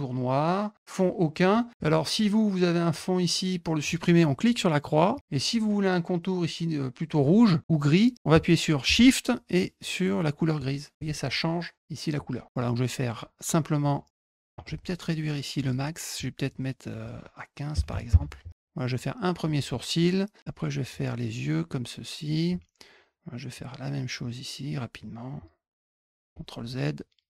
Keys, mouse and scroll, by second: 5.1 click, 10.5 shift+click, 13.8 click, 14.6 z, 15.5 click, 16.9 click, 18.9 click, 20.4 click, 21.6 click, 23.5 click, 24.9 click, 26.6 click.